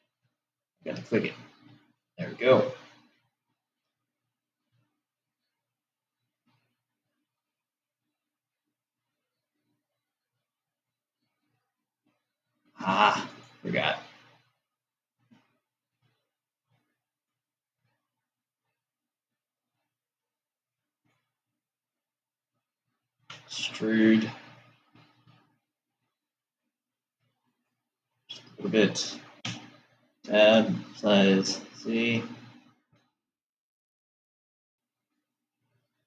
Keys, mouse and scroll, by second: 3.5-6.9 middle drag, 7.9 click, 13.8 click, 15.8 click, 21.4 shift+click, 23.7 e, 30.1 Tab, 31.0 s.